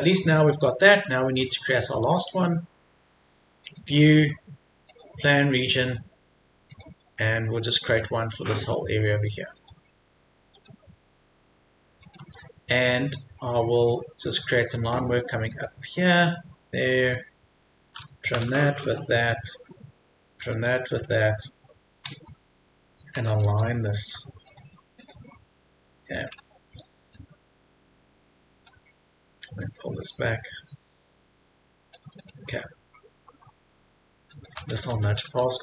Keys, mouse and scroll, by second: 1.6 middle click, 3.6 click, 13.1-13.8 scroll up 1, 13.8 Escape, 14.9 click, 17.5 Escape, 18.8 click, 21.4 Escape, 22.2-22.7 scroll up 1, 24.5 click, 25.3 scroll down 1, 25.5 Escape, 25.9-26.3 scroll down 1, 26.3-32.1 drag, 32.6-32.9 scroll down 1, 32.9 middle click, 33.5-34.3 scroll up 1, 34.3 click, 34.8 typing.